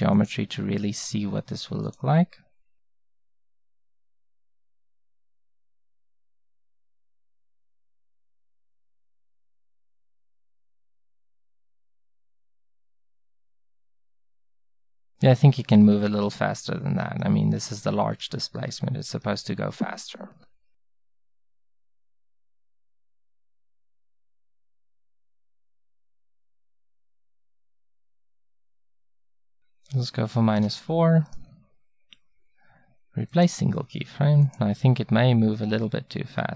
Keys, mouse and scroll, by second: 5.5 Right, 6.0 Right, 6.2 Right, 6.4 Right, 6.8 Right, 7.1 Right, 7.3 Right, 7.5 Right, 7.7-18.1 Right, 18.6 Right, 18.9 Right, 35.8 Right, 36.3 Right.